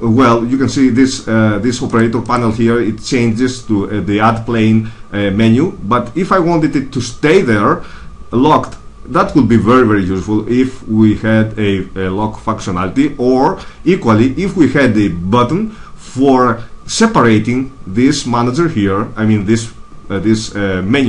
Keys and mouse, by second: 1.8-4.0 drag.